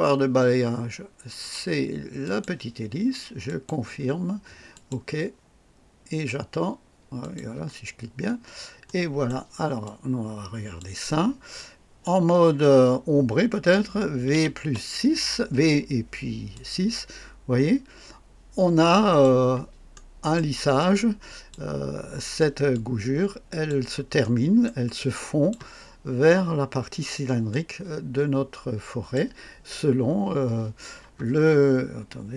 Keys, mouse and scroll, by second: 2.2 click, 3.4 click, 4.7 click, 7.2 click, 8.2-8.5 scroll up 1, 8.8 right click, 9.8-11.0 drag, 14.3 v, 14.6 KP_6, 16.5-19.4 drag, 19.9 right click, 20.8 click, 22.7-23.8 drag, 24.2 right click, 24.9-25.7 drag, 27.5-29.3 drag.